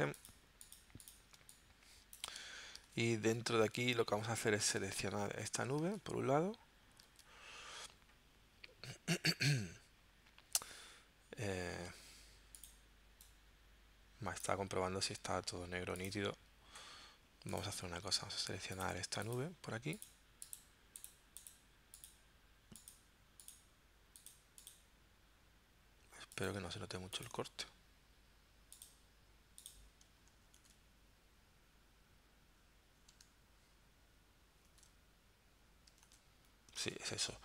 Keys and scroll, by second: 0.0 z, 1.4 space, 3.0 super+Tab, 4.4 super+Tab, 5.9 super+Tab, 7.1 super+Tab, 30.6 super+Tab, 34.6 super+Tab, 36.1 super+Tab, 36.9 super+Tab.